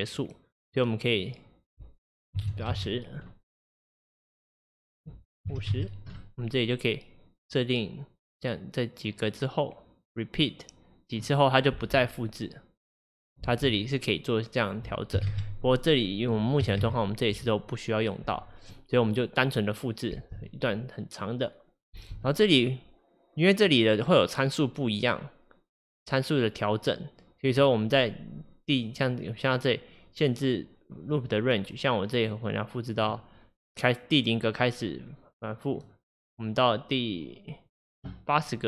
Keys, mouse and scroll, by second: 11.8 space, 13.5 space, 14.6-20.2 drag, 20.2 space, 22.0 space, 26.1 click, 31.2-38.6 drag.